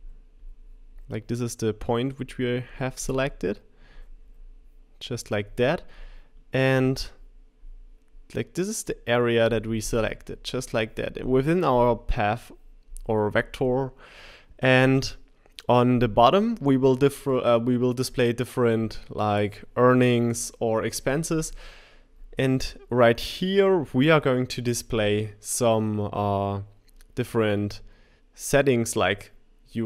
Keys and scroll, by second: 0.9 shift+Left.